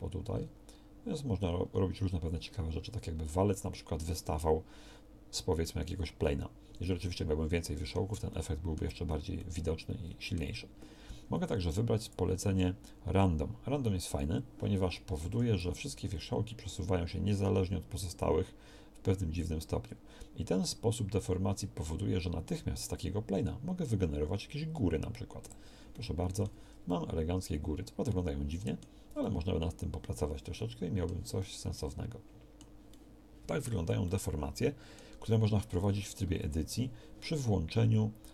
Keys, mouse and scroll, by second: 15.3 g, 26.7 Tab, 35.9 Tab, 36.7 a.